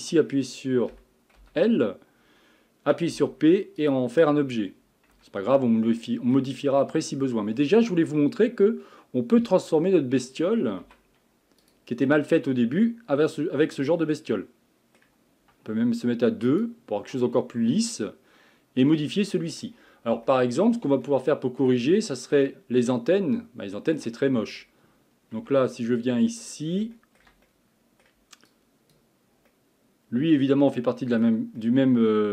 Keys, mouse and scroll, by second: 0.9 a, 1.4 l, 3.1 p, 5.1 Tab, 5.6 scroll up 2, 6.0 middle click, 6.7 scroll down 2, 10.8 z, 12.1-15.1 middle drag, 16.5 click, 17.2-19.8 middle drag, 19.8 scroll up 4, 20.3-25.4 shift+middle drag, 25.4 Tab, 25.8 middle click, 26.6-27.0 scroll down 1, 27.0-28.5 shift+middle drag, 28.5 click, 29.5-32.3 middle drag.